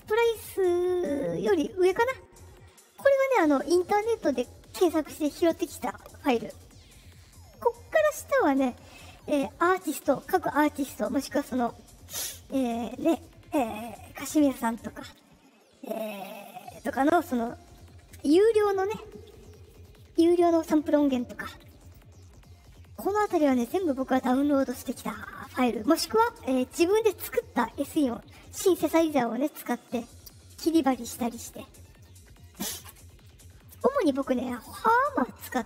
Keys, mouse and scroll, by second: 21.8 click.